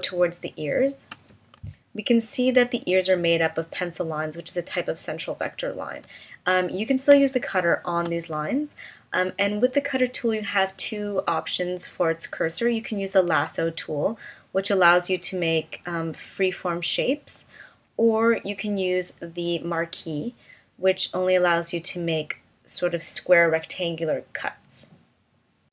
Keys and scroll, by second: 1.6 v, 7.1 space.